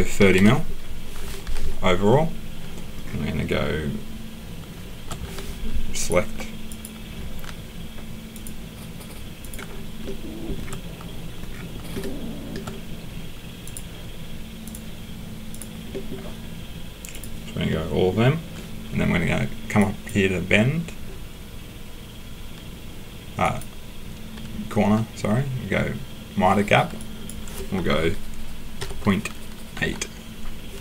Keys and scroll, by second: 0.0-0.9 typing, 28.8-29.7 typing.